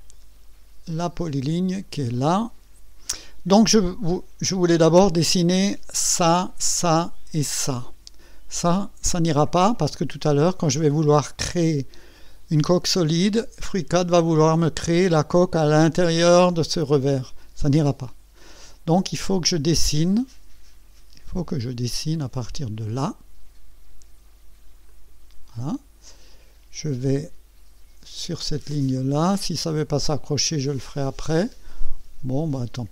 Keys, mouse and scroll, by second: 1.7 click, 24.9 click.